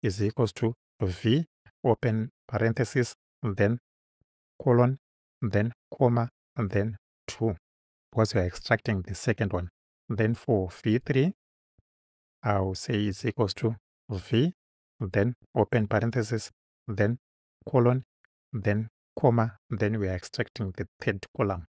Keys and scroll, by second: 0.7 shift+=, 1.1 shift+v, 2.7 shift+9, 4.7 shift+;, 5.9 ,, 7.3 2, 8.7 Right, 10.0 Return, 11.4 v, 11.8 3, 13.1 =, 13.8 shift+=, 15.8 shift+9, 17.6 shift+;, 19.3 ,, 21.0 3.